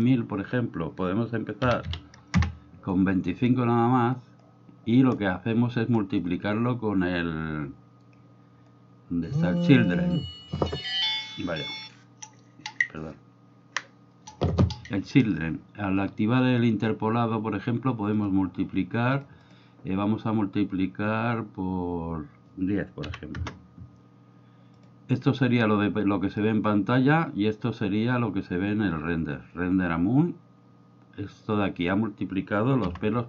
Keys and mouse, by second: 0.0-3.0 drag, 9.8 click, 16.7 click, 18.1-19.2 drag, 19.4-24.8 drag.